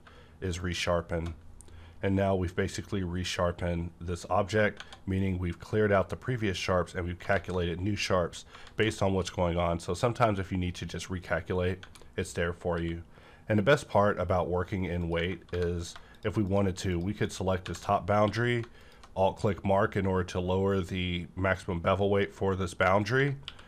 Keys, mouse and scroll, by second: 0.0 click, 0.0 q, 0.5 ctrl+shift+click, 4.8 Tab, 4.8 ctrl+shift+click, 5.3 Right, 5.3-7.0 scroll up 1, 7.3 alt+z, 8.5 alt+z, 9.7-11.5 scroll down 1, 11.7 Tab, 12.7 q, 13.7 click, 15.0 click, 15.4 3, 15.7 click, 16.5 shift+click, 17.6 shift+`, 18.1 q, 18.2 shift+`, 18.8 click, 18.8 q, 23.0 click, 23.1 Tab, 23.4 q.